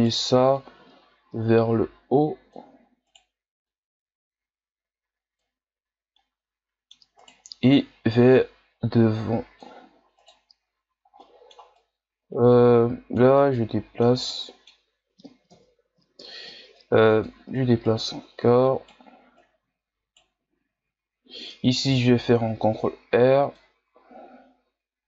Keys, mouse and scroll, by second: 0.0 right click, 0.6-3.1 drag, 3.1 right click, 3.7-6.1 drag, 6.1-7.2 middle drag, 7.2 right click, 8.3-10.2 drag, 10.2 right click, 11.2 middle click, 11.8-13.4 drag, 13.4-15.5 middle drag, 15.5 KP_1, 16.8-17.8 drag, 17.8 right click, 19.4 right click, 21.0-21.9 scroll up 1, 21.9 ctrl+r.